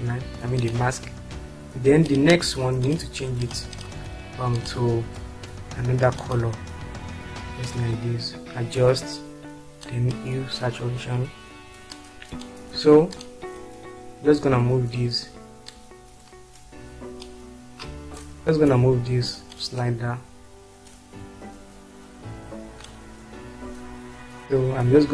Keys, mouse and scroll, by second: 3.6 ctrl+click, 4.6 ctrl+click.